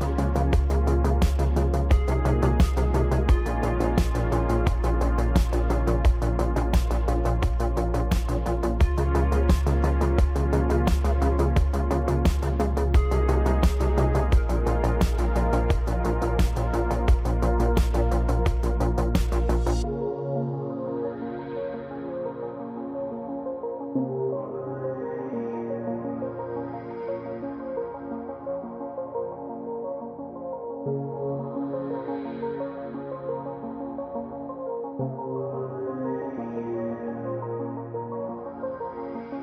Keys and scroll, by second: 0.4 g, 2.4 g, 3.6 g, 7.6 e, 8.4 g, 9.7 g, 10.7 g, 11.6 g, 12.4 g, 15.7 e, 16.6 g, 18.0 g, 19.0 g, 20.8 g, 22.2 e, 24.2 g, 25.9 g, 27.7 g, 29.0 s, 29.5 z, 30.0 KP_0, 30.5 Return, 31.2 g, 31.4 x, 32.8 Tab, 36.4 Tab, 38.3 3.